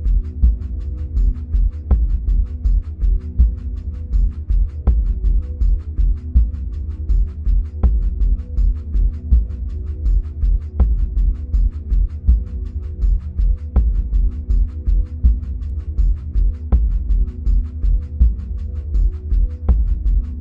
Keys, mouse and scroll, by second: 0.3-10.4 drag, 13.9-17.2 middle drag, 17.2-17.5 drag, 19.9-20.4 middle drag.